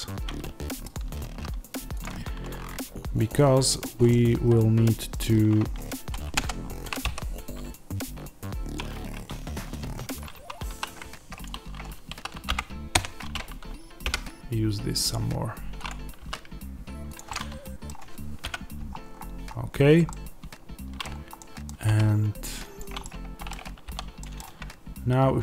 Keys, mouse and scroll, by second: 0.8 shift+click, 1.9 click, 2.0 Tab, 2.4-2.9 scroll up 1, 2.9-3.7 scroll down 1, 3.7 click, 4.0-11.3 middle drag, 8.7 x, 10.2 1, 10.6 2, 11.3 alt+click, 12.0 s, 14.0 g, 15.8 click, 16.1 s, 17.0 click, 17.2-22.7 middle drag, 18.9-19.7 scroll, 21.8 g, 22.7 click, 22.9-25.4 middle drag, 23.7 o.